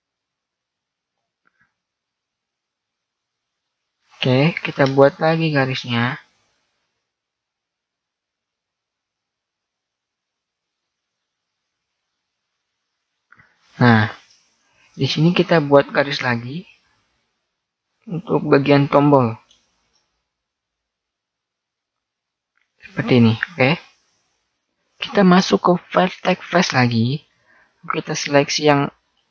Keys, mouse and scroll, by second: 4.5 ctrl+r, 14.9 ctrl+r, 19.9 ctrl+r, 26.4-27.9 drag, 27.5 right click, 28.5 right click, 29.2 middle click.